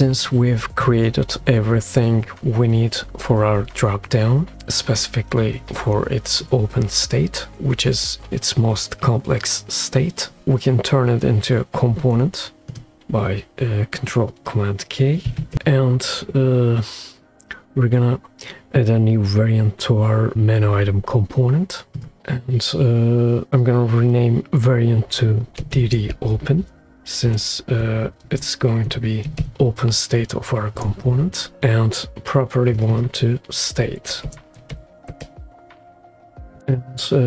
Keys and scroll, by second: 15.3 alt+super+k, 25.9 shift+d, 27.0 -, 27.0 *, 27.4 BackSpace, 28.5-29.9 typing, 31.0 Return, 34.3-35.8 typing.